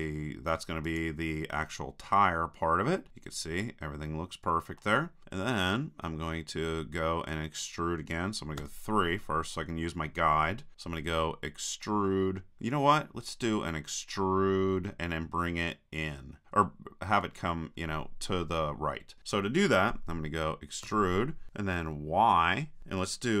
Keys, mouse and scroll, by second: 1.0-2.9 drag, 2.9 middle click, 5.2-8.6 middle drag, 8.6 KP_3, 15.6-16.9 drag, 16.9 middle click, 20.9 e.